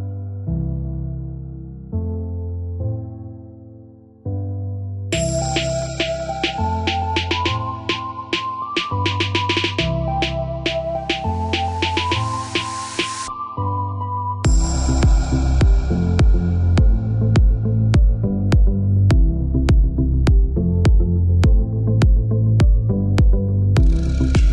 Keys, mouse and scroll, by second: 2.1 click, 6.8 middle click, 7.5 click, 9.2 click, 9.9 middle click, 12.8 click, 14.5 space, 15.7 click, 20.1 click, 24.2 click.